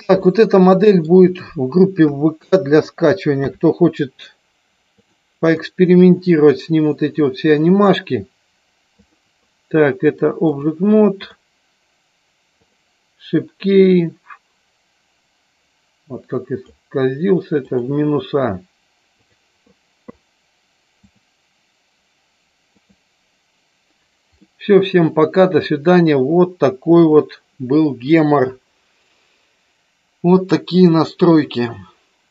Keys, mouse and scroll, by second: 0.3 middle click, 5.0 click, 5.6-7.9 middle drag, 9.0 click, 10.3 click, 13.9-16.7 drag, 17.7 click, 21.2-23.0 drag, 24.5 middle click, 27.1 click.